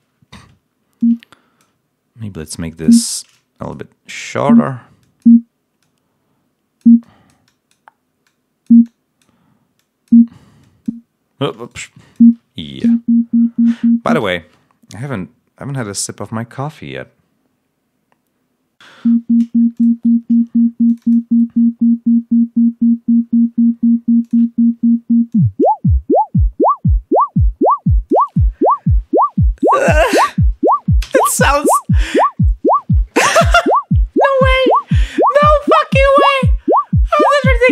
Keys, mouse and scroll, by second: 0.3 space, 1.2 click, 2.4 click, 3.3 click, 4.1 click, 4.9 click, 5.7-6.9 drag, 8.2-9.3 drag, 9.7 click, 10.5 click, 11.6 shift+right click, 11.8 shift+click, 12.7 l, 14.0 space, 19.0 l, 19.7 click, 20.8 click, 24.2 click, 25.3-27.3 drag, 31.2 space.